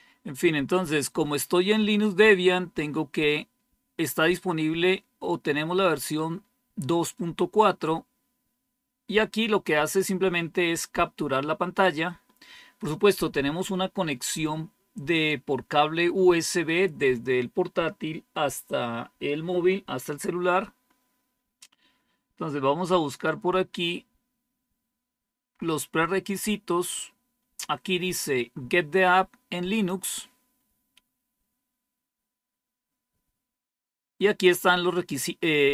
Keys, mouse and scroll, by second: 0.4-0.9 scroll down 2, 1.5-3.1 scroll down 3, 7.0-8.5 scroll down 3, 8.9-9.5 scroll down 1, 9.5-10.5 scroll up 2, 20.8-23.4 scroll down 4, 23.9-25.8 scroll down 3, 26.3-27.1 scroll down 2, 29.6 click, 34.1-34.8 scroll down 2.